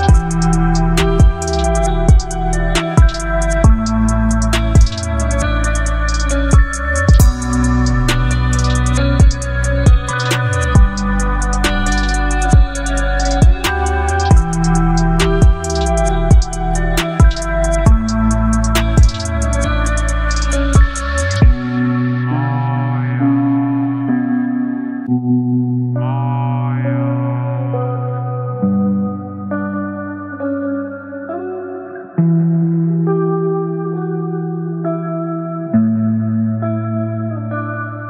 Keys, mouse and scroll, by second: 7.2-7.8 alt+drag, 11.0 click, 12.4 v, 12.6 ctrl+t, 15.3-16.9 drag, 20.5-23.1 shift+drag, 28.5 alt+scroll up 1, 29.7 alt+scroll down 1, 30.7 space, 30.8-31.4 click, 31.2 space, 32.3 click.